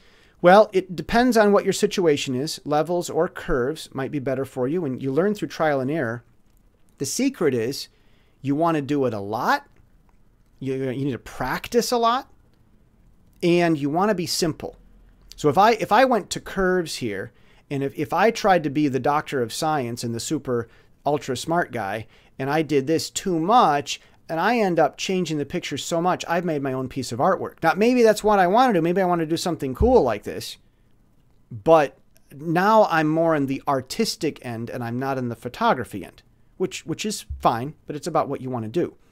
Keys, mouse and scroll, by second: 3.2 click, 9.6 click, 10.6 click, 11.5 click, 14.3 click, 15.9 click, 17.9 click, 19.3 click, 20.7 click, 21.8 click, 23.2 click, 24.7-26.0 drag, 32.2 scroll down 2, 37.5-39.1 drag.